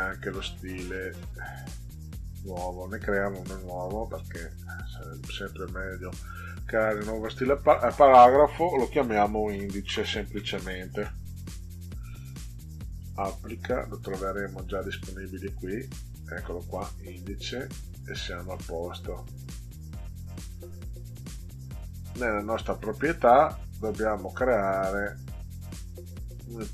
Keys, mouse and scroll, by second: 2.8-3.2 drag, 3.7 click, 4.9 click, 5.9 click, 8.9-11.0 typing, 12.9 click, 14.1 click, 15.4 click, 16.5 click, 18.6-21.0 drag, 22.0 click, 26.2 click.